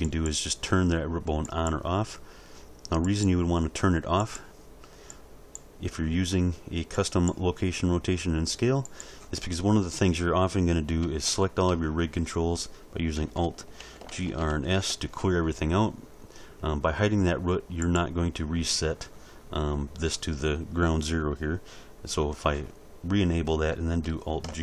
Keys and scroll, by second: 11.0 a, 14.0 alt+g, 14.2 alt+r, 14.6 alt+s, 24.4 alt+g.